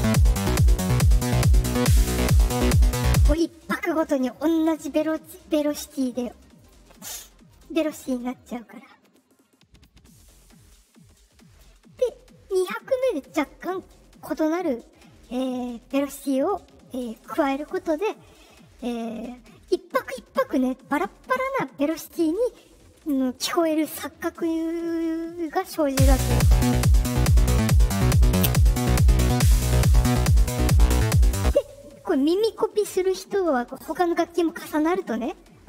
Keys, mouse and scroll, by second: 3.2 space, 3.9-5.6 right drag, 6.5 click, 7.4 right click, 8.6-9.8 drag, 10.6 click, 25.8 space, 31.3 space.